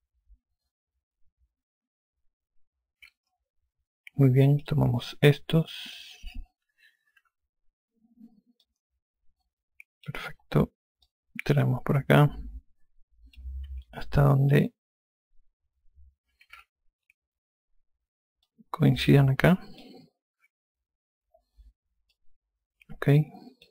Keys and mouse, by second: 0.3 alt+click, 5.6 click, 7.4-8.3 typing, 9.2 alt+click, 11.6 click, 14.3 F1, 16.9 n, 19.0 click, 22.7 alt+click.